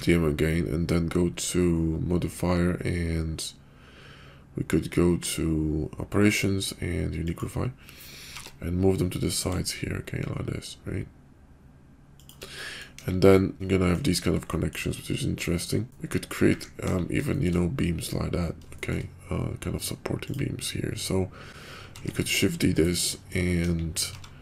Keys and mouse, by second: 8.3 g, 12.5 middle click, 13.0 KP_5, 13.3 click, 13.6 middle click, 14.5 shift+middle click, 14.9-16.3 middle drag, 16.9 KP_5, 17.3 shift+middle click, 18.7 shift+middle click, 21.9 shift+d, 23.0 middle click, 23.5 KP_5, 24.1 g.